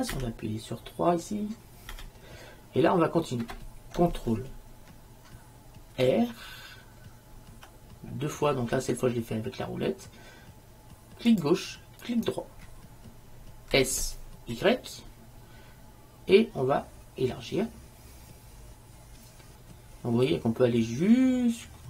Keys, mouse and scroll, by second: 0.2 KP_3, 2.0 KP_3, 6.1 ctrl+r, 13.9 s.